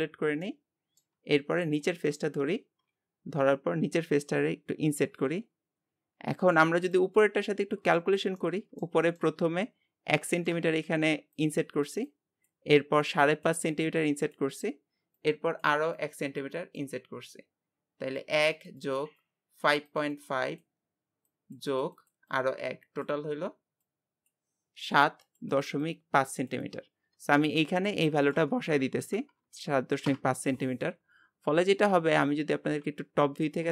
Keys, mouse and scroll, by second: 0.4 middle click, 1.1 Tab, 1.5-1.9 scroll up 1, 1.9 click, 2.9-5.0 scroll up 1, 5.0 i, 7.2-9.4 middle drag, 9.4-10.3 scroll up 5, 10.3 shift+middle click, 28.3-33.7 drag.